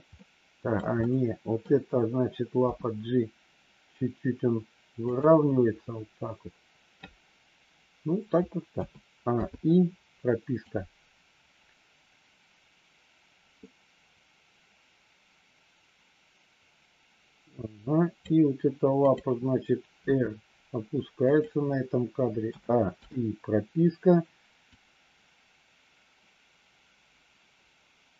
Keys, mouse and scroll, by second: 0.4 middle click, 0.9 middle click, 2.5 g, 8.7 a, 9.3 i, 10.5-18.3 drag, 18.9 click, 19.9 r, 22.4 a, 22.9 i, 24.7-28.1 drag.